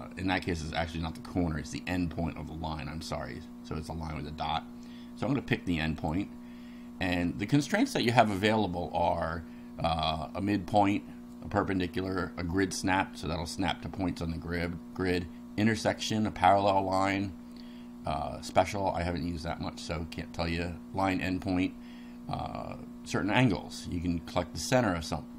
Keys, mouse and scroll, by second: 6.0 click.